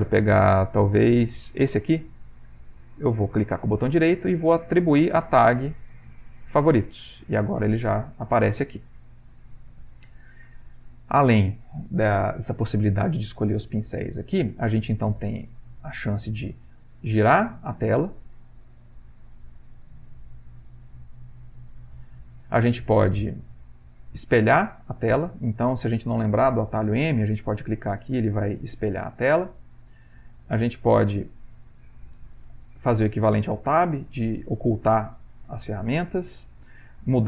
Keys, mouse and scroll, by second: 4.1-6.2 right drag, 15.3-20.2 drag, 20.7-21.7 drag, 24.1 click, 25.0 click, 25.5 click, 26.2 click, 26.7 click, 27.3 click, 27.7 click, 28.2 click, 29.0 click, 29.5 click, 30.8 click, 32.4 click, 33.9 click, 35.5 click.